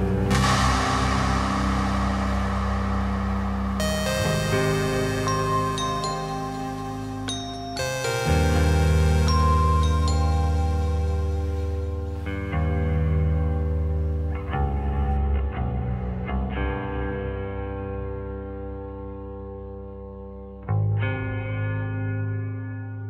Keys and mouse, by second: 0.2 shift+middle click, 0.9 middle click, 1.5 middle click, 3.4 Tab, 3.9 click, 4.5 click, 5.2-6.9 drag, 7.3 shift+click, 7.7 click, 8.0 click, 8.3 Tab, 9.4 shift+click, 9.8 middle click, 10.3 click, 11.3 shift+click, 11.8 shift+click, 12.7 shift+click, 13.5 shift+click, 14.5 shift+click, 15.3 shift+middle click, 15.7 shift+click, 16.5 middle click, 17.4 shift+click, 18.2 middle click, 18.7-19.1 middle drag, 19.2 middle click, 19.6 shift+click, 19.9-22.8 middle drag.